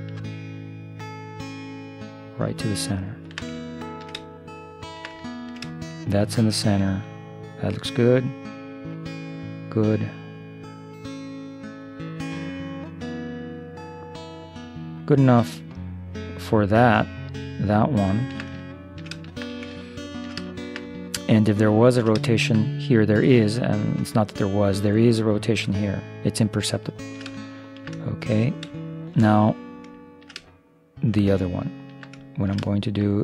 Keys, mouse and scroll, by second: 3.6-9.6 middle drag, 12.8-15.4 middle drag, 16.7 middle click, 17.0-24.1 middle drag, 25.9-28.1 middle drag, 30.3-32.1 middle drag, 32.3 middle click.